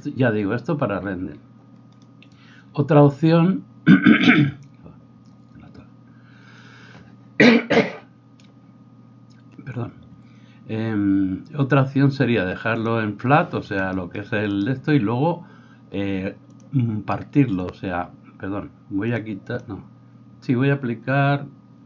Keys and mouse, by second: 0.2-2.7 middle drag.